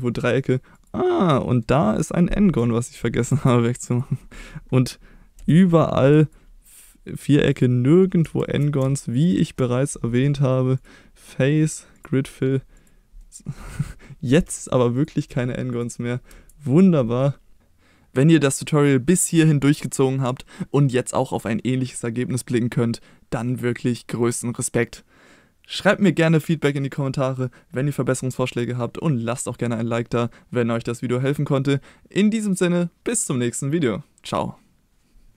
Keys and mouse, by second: 0.8 click, 1.3 middle drag, 2.7 shift+middle drag, 3.3 Tab, 5.3 x, 7.5 click, 7.8 middle click, 10.8-12.0 drag, 13.2 middle click, 14.6 click, 16.3 Tab.